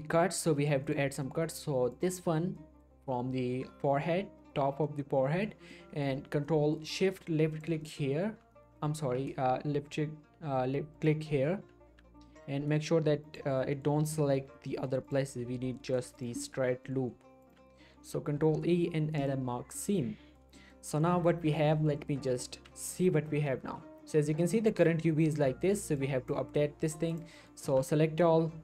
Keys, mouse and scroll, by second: 0.3-0.8 scroll up 1, 0.8 click, 1.1 scroll down 1, 1.2 middle click, 1.9 click, 2.6 middle click, 3.3 middle click, 3.5-4.4 scroll up 1, 4.4 scroll down 1, 4.4-5.4 middle drag, 7.5 ctrl+shift+click, 7.7 ctrl+shift+click, 7.8 ctrl+shift+middle click, 9.0 ctrl+z, 10.9 ctrl+shift+click, 11.4 ctrl+shift+click, 11.9 ctrl+z, 12.3 middle click, 12.5 scroll up 1, 13.3 ctrl+shift+click, 13.7-14.1 shift+scroll down 2, 14.6 middle click, 15.1 ctrl+shift+click, 15.7 middle click, 15.9 middle click, 16.2 ctrl+shift+click, 16.4 ctrl+shift+middle click, 16.8 scroll up 1, 16.8 middle click, 17.4 ctrl+shift+click, 18.3 ctrl+e, 19.2 click, 19.4 click, 19.6 scroll down 1, 19.7-20.4 middle click, 21.3 shift+middle click, 22.6 a, 24.3-24.7 scroll up 1, 24.9-25.5 click, 25.6-26.0 scroll down 1, 26.0-26.6 click, 27.3 middle click, 27.7 a.